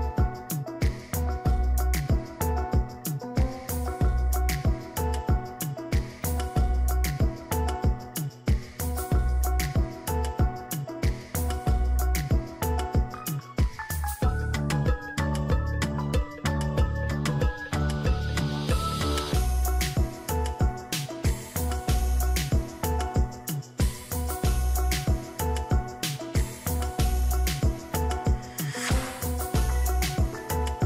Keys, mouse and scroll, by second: 8.8 ctrl+t, 10.1 shift+click, 12.1 alt+click, 18.6 ctrl+j, 19.4 ctrl+click, 22.5 double click.